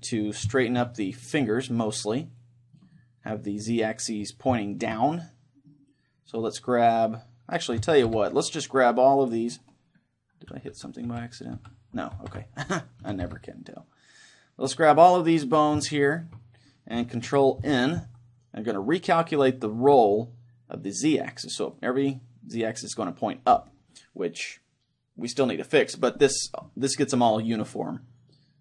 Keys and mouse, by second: 2.9-6.9 middle drag, 6.5-8.6 right drag, 7.8 a, 8.6 c, 9.5-11.6 right drag, 10.7 ctrl+z, 11.1 ctrl+z, 11.6 ctrl+z, 13.1 ctrl+shift+z, 13.1 a, 14.5 c, 15.6-18.4 right drag, 17.6 ctrl+n, 23.0-25.3 middle drag, 26.7-28.6 middle drag.